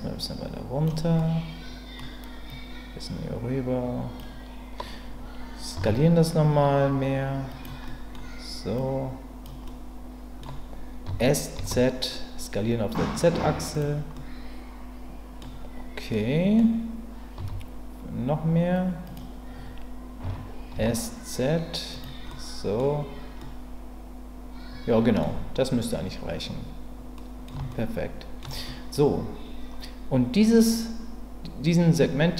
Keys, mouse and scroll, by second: 1.2 middle click, 2.6-4.2 drag, 5.8 s, 7.5 click, 7.9 middle click, 8.8 click, 9.7 middle click, 11.1 s, 11.6 z, 13.7 click, 14.1-15.4 middle drag, 16.1 middle click, 17.4 s, 19.0 click, 20.2 s, 20.7 z, 21.9 click, 22.3 middle click, 23.4-25.2 middle drag, 27.1 middle click, 27.7 shift+middle click, 28.6 middle click.